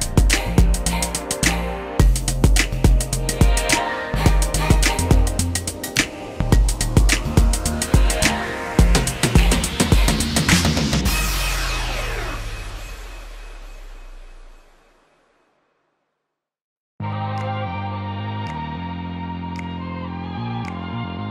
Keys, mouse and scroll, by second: 5.0 ctrl+click, 5.5 shift+middle click, 6.8 typing, 9.7 shift+click, 10.0 shift+middle click, 10.2 shift+double middle click, 10.3 shift+middle click, 12.1 shift+s, 13.2 ctrl+click, 17.6 ctrl+click.